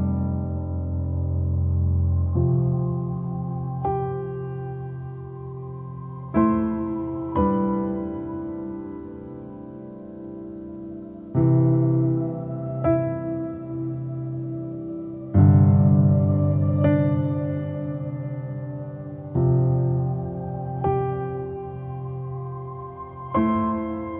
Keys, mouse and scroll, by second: 1.1 click, 1.5 /, 2.5-2.9 scroll up 2, 2.9-4.9 middle drag, 4.9 click, 5.5 scroll down 2, 5.8 middle click, 6.3-6.6 scroll up 2, 6.6 middle click, 7.2 Tab, 7.9-8.7 scroll down 4, 8.7 Tab, 9.7 scroll up 1, 9.8 middle click, 10.5-11.0 scroll up 2, 11.0-12.5 middle drag, 12.5 /, 13.3 click, 13.6 /, 14.1 scroll up 2, 14.5-17.3 middle drag, 17.3 scroll up 1, 17.4 Tab, 17.9 Tab, 18.7-19.2 scroll down 2, 19.2 /, 19.6 click, 19.8 /, 20.3-21.0 scroll up 2, 21.0-23.7 middle drag.